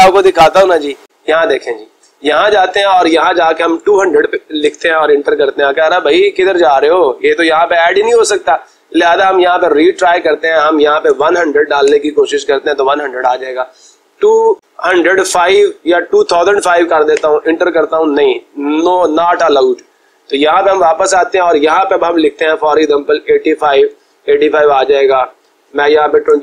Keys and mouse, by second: 0.3 Escape, 1.5 click, 2.5 click, 3.4-4.3 typing, 4.6 Return, 9.2-10.2 drag, 10.7-11.6 typing, 11.9 Return, 14.0-15.0 typing, 16.3 5, 17.2 Return, 19.6-20.7 drag, 23.0-23.9 typing, 24.2 Return, 25.9-26.4 typing.